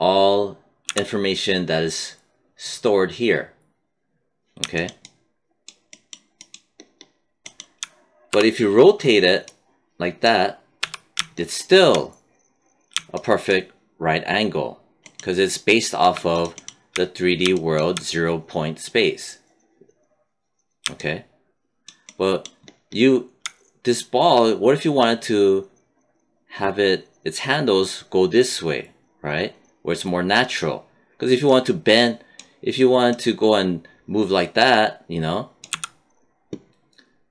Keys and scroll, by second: 0.8 z, 8.2 e, 10.7 w, 35.6 z.